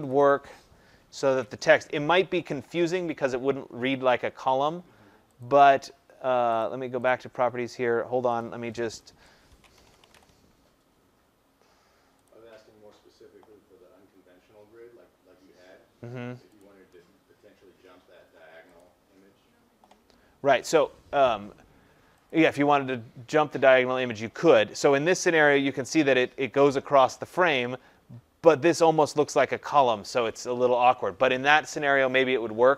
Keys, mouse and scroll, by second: 0.0 click, 0.2 click, 1.2 ctrl+a, 5.3 click, 7.0 click, 8.3 click, 8.9 click, 9.7-10.1 typing, 12.2 click, 16.6 click, 18.7 click, 22.3 click.